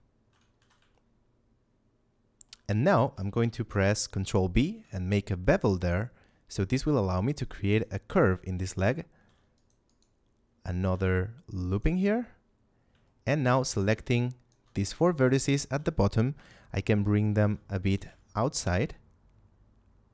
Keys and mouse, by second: 0.5 z, 0.8 shift+middle click, 2.6 middle click, 4.4 ctrl+b, 7.6 click, 8.0 a, 9.0 ctrl+r, 9.5 click, 9.8 right click, 10.8 g, 10.8 z, 11.6 click, 13.0 shift+middle click, 13.6 a, 14.0 ctrl+click, 14.8 shift+middle click, 16.3 KP_7, 17.0 middle click, 17.4 z, 17.8 g.